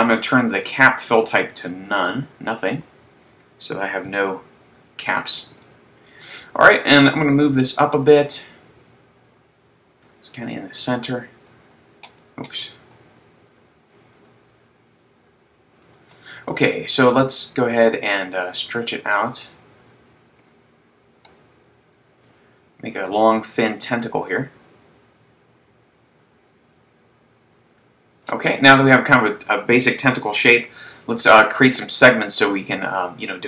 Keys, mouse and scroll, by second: 0.6 click, 4.3 KP_3, 4.7 KP_5, 5.9 shift+middle click, 7.6 click, 13.3 click, 14.2 s, 15.9 click, 16.5 Tab, 20.0 shift+click, 21.3 click, 24.4 click.